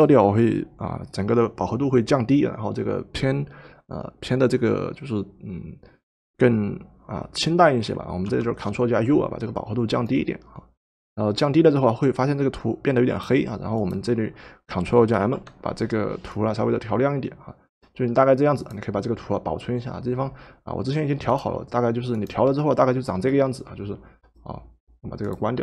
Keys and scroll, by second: 8.3 ctrl+u, 15.1 ctrl+m.